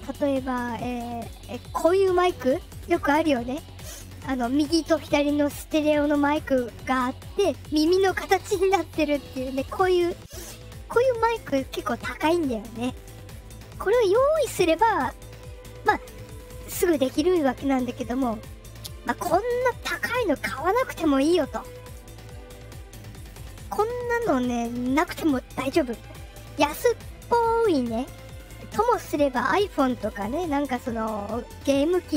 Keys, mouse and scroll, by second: 1.0 click, 23.1 click.